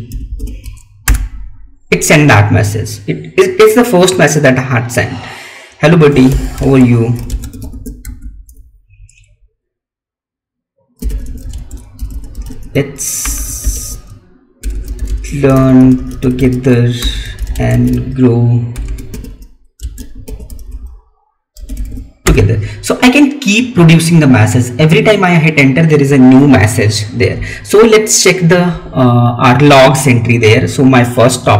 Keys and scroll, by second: 6.6 space, 11.4 space, 15.1 space, 17.4 space, 19.7 space.